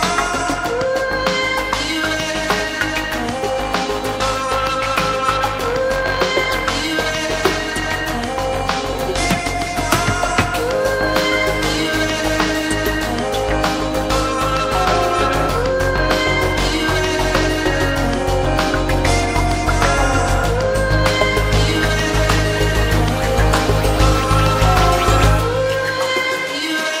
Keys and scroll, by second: 3.9 Return, 7.1 Escape, 8.2 alt+a, 10.3 alt+z, 17.0 Escape, 18.4 Return, 21.7 Escape.